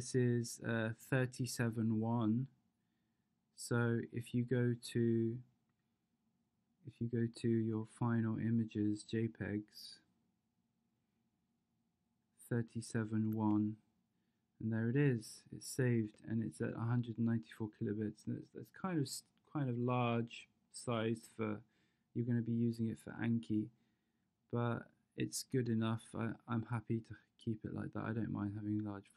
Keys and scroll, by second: 13.3 space, 16.0 space.